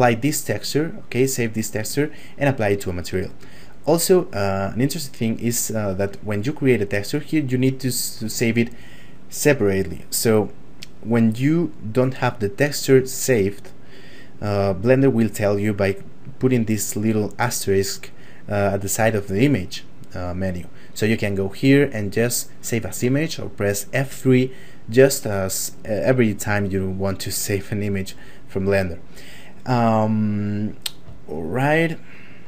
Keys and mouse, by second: 31.4 shift+middle click.